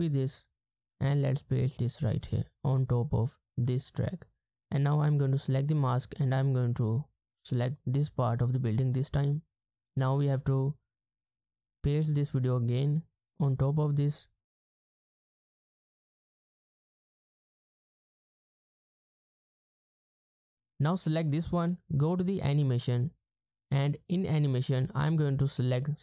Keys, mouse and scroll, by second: 10.2 right click, 18.1 double click.